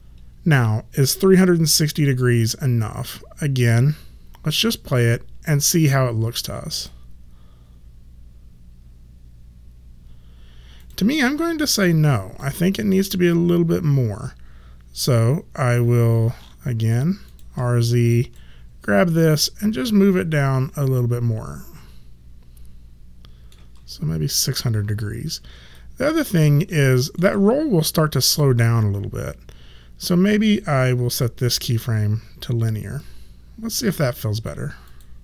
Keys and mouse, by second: 3.5 click, 10.8 click, 17.2 click, 19.3 shift+middle click, 25.7 alt+right click, 26.6 alt+middle click, 28.0 click, 31.0 click.